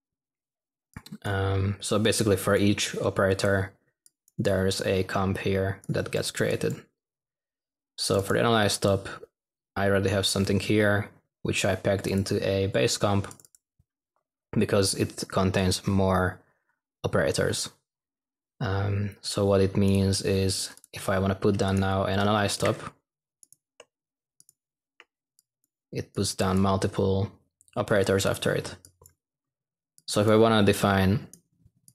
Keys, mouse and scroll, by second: 22.2-23.0 typing, 28.4 typing.